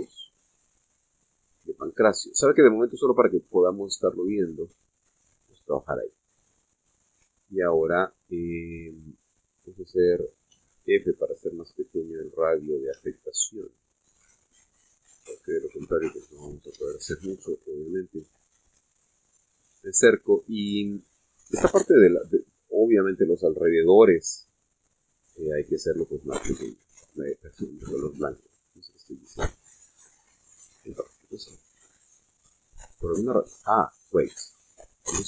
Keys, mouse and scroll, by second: 0.1 middle click, 1.2 middle click, 1.8 middle click, 2.4-2.9 scroll up 1, 3.0 middle click, 4.4 click, 5.3 click, 7.1-7.5 scroll up 1, 7.7 shift+middle click, 11.6 f, 12.8 click, 14.0 f, 16.6 click, 17.2-18.0 scroll up 3, 18.0 shift+middle click, 19.0 shift+middle click, 19.8-20.3 shift+scroll up 3, 20.5 middle click, 23.6 scroll up 1, 23.9 scroll down 2, 24.7 f, 25.6 click, 26.6 scroll up 1, 28.7 click, 29.2 click, 30.4-31.5 scroll down 4, 31.6 middle click, 32.6-33.0 scroll down 1, 33.3 scroll down 1, 33.6 middle click, 34.8 click.